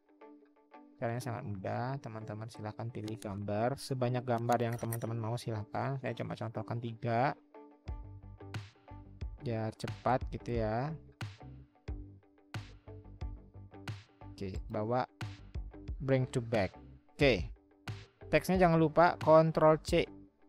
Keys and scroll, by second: 19.7 ctrl+c.